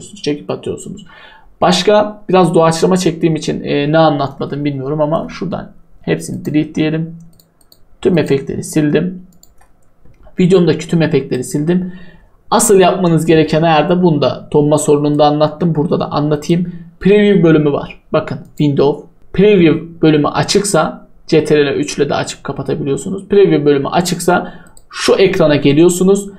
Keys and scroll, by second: 5.2 Delete, 6.6 Delete, 8.4 Delete, 9.5 Delete.